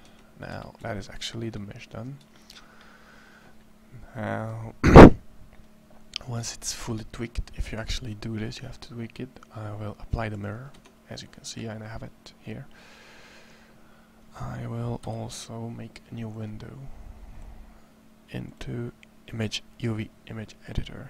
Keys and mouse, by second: 0.3 Tab, 10.5 Tab, 14.8 n, 16.6-18.0 middle drag.